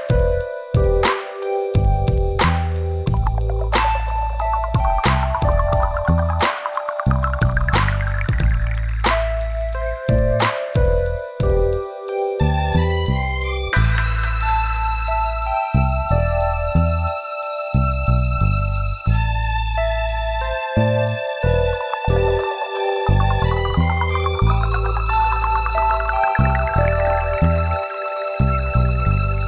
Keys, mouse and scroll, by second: 0.9 scroll up 2, 4.7 click, 11.3 scroll down 1, 15.3 scroll up 2, 15.7 click, 17.3 click, 17.6 click, 18.2 click, 18.3 click, 19.8 click, 21.9 click, 23.1 click, 23.6 click, 23.7 click, 24.3 click, 24.4 click, 25.6 click, 28.5 click.